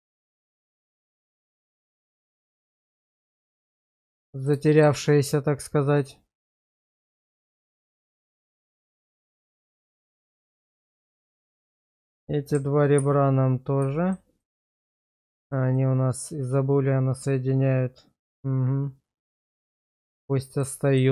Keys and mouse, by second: 0.0 middle click, 1.4 click, 2.3 1, 2.9 shift+middle click, 3.6 middle click, 4.7 shift+middle click, 5.1-7.5 middle drag, 7.9 shift+middle click, 8.4 middle click, 9.1 shift+middle click, 9.5 middle click, 10.3 Tab, 11.3 shift+middle click, 13.0 ctrl+x, 14.0 shift+middle click, 14.4 middle click, 15.3 shift+middle click, 15.7-19.2 middle drag, 19.4 shift+middle click, 19.8 middle click, 20.8 shift+middle click.